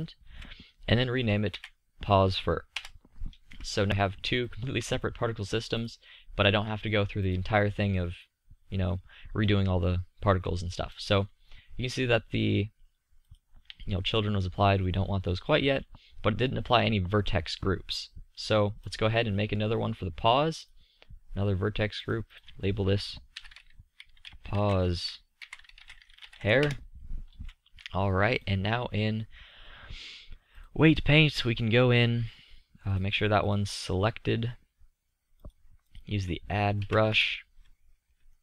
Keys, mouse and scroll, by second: 4.5-8.9 drag, 9.4-9.7 middle drag, 13.6-15.7 drag, 17.1-18.8 middle drag, 27.4 middle click, 31.1-32.8 middle drag, 36.8 KP_3, 37.2 KP_5.